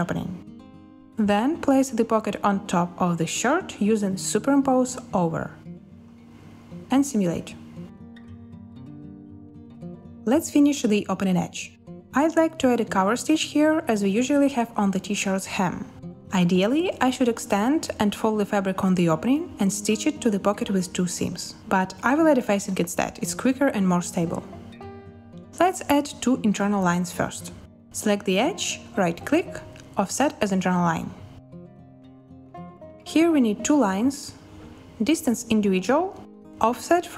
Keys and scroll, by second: 0.8 a, 6.2 space, 9.9 space, 25.8 z.